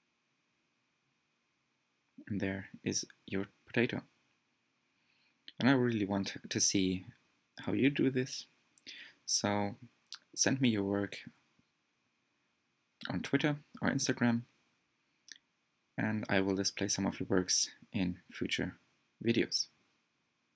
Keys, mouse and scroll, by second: 14.1-17.1 middle drag, 17.1 scroll down 1, 17.3-18.0 scroll up 4, 20.5 scroll up 4.